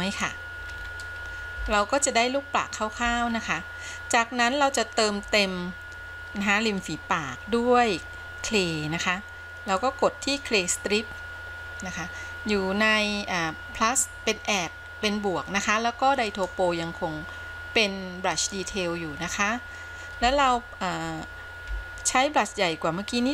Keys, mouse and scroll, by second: 1.0-1.8 scroll up 2, 1.9-3.4 shift+middle drag, 3.6-4.7 scroll up 1, 4.7-7.1 scroll down 1, 9.9 click, 16.4-18.6 drag, 21.8 f.